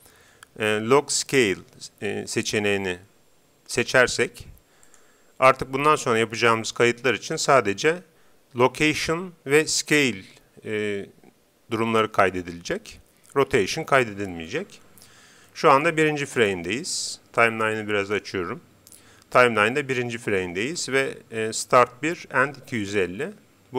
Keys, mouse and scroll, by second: 15.4-17.4 middle drag, 17.4-19.1 drag.